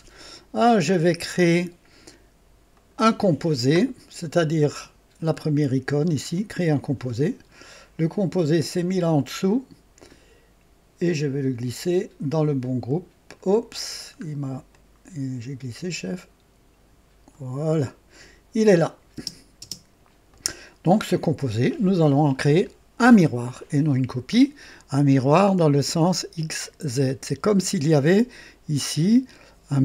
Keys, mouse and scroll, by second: 2.9 click, 4.7 click, 6.2 click, 7.6 scroll down 1, 10.0-13.1 drag, 14.0 scroll down 1, 14.7-17.5 drag, 19.1 space, 19.6 space, 20.2 click, 26.0-27.4 drag.